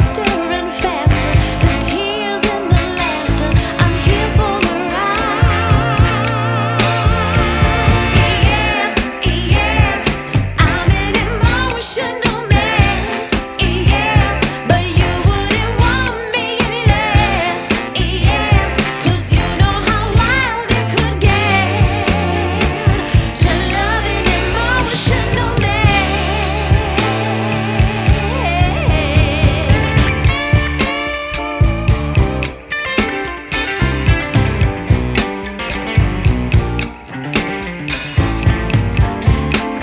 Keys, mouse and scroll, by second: 0.2 right click, 4.0 click, 6.5 click, 9.9 n, 12.3 click, 13.5 click, 14.5 click, 16.3 click, 17.1 click, 20.5 click, 21.1 click, 22.5 click, 23.2 click, 24.1 shift+a, 33.4 click, 34.0 click, 35.6 shift+d, 38.3 click, 39.5 click.